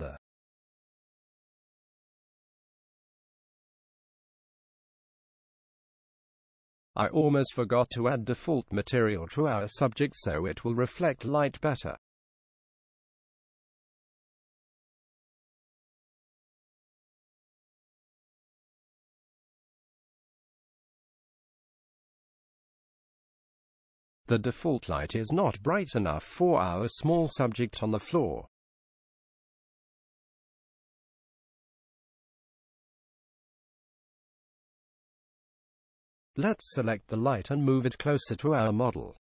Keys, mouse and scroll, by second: 5.5-7.3 drag, 8.9-13.5 drag, 17.2 KP_7, 20.9-22.7 drag, 28.4-30.1 drag, 33.4-35.3 drag, 35.6 KP_1, 37.9-39.3 drag.